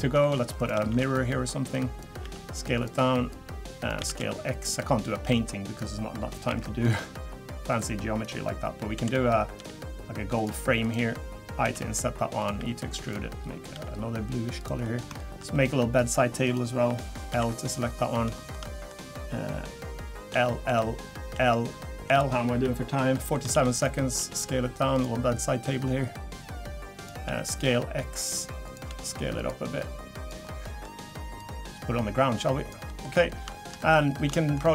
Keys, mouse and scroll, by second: 0.2 middle click, 0.6 click, 0.9 shift+d, 1.7 click, 2.2 s, 3.3 click, 4.0 s, 5.2 click, 6.5 alt+e, 8.9 l, 9.6 g, 10.8 click, 11.6 i, 13.7 g, 14.8 middle click, 15.2 shift+middle click, 15.5 middle click, 16.0 click, 16.4 click, 17.3 l, 17.5 middle click, 17.7 scroll up 5, 18.3 shift+middle click, 18.6 middle click, 20.3 l, 20.6 l, 21.3 l, 22.0 l, 22.9 scroll down 2, 23.1 middle click, 23.5 shift+d, 25.7 click, 27.2 s, 28.9 s, 29.8 click, 30.4 middle click, 31.4 click, 32.9 middle click, 33.2 scroll down 3, 33.5 shift+middle click, 33.8 middle click, 34.0 scroll up 2, 34.3 shift+middle click.